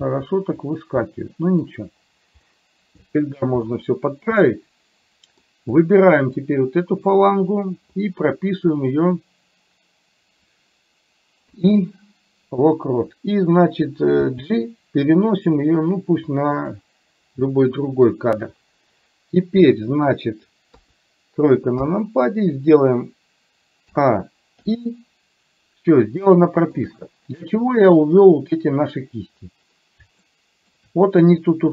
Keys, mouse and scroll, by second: 0.2 g, 1.2 middle click, 2.5 middle click, 3.8 middle click, 4.5-5.8 middle drag, 5.8 click, 11.5 i, 14.4 g, 20.8 KP_3, 21.8 KP_1, 24.0 a, 24.7 i, 26.4 shift+middle click, 30.4 shift+middle click.